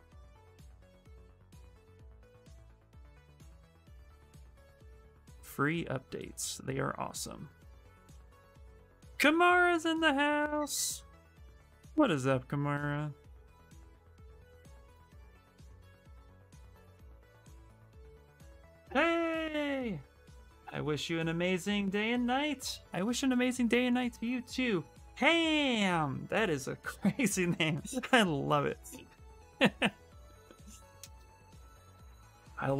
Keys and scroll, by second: 7.2 s, 17.6 s.